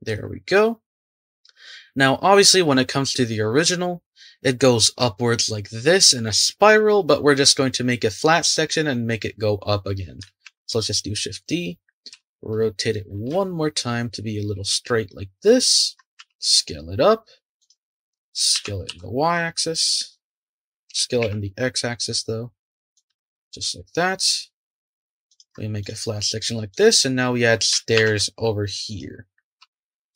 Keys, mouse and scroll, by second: 0.5 click, 10.4 shift+d, 12.1 r, 16.2 s, 18.5 s, 20.9 s, 23.1 g, 25.8 click, 26.7 click, 27.9 shift+d, 29.6 r.